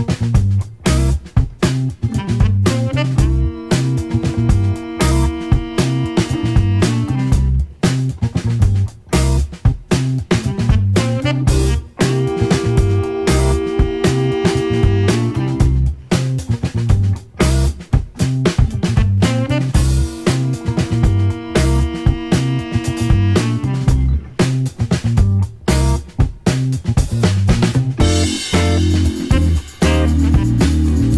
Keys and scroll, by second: 16.7 Left, 17.1 Left, 17.6 Left, 20.8 Up, 21.3 Right, 21.6 Right, 21.9 Right, 22.1 Right, 22.4 Right, 22.8 Right, 24.1 Left.